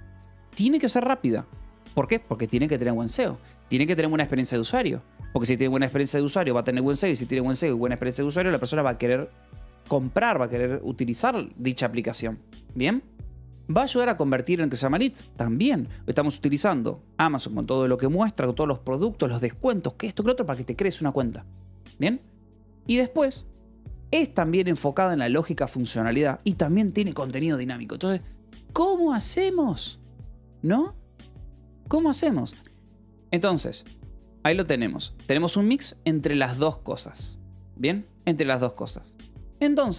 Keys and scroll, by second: 0.1 j, 0.8 shift+v, 1.7 Escape, 1.9 j, 2.8 shift+v, 3.0 Escape, 3.9 shift+v, 5.1 Escape, 6.1 j, 6.6 Escape, 13.9 shift+v, 22.3 Escape, 22.6 j, 24.2 Escape, 24.4 j, 25.2 shift+v, 26.1 Escape, 26.5-27.4 typing, 32.5-36.0 typing, 34.5 Escape, 38.3 k, 38.9 j.